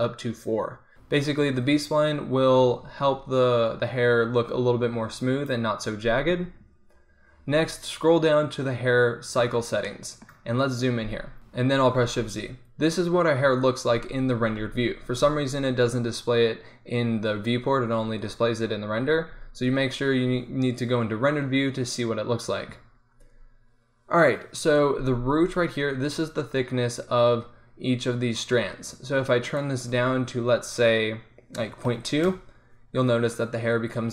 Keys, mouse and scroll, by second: 9.3-10.5 middle drag, 12.2 shift+z, 15.3 z, 15.4 z, 19.3 shift+z, 24.6-29.6 middle drag, 29.6-32.6 drag.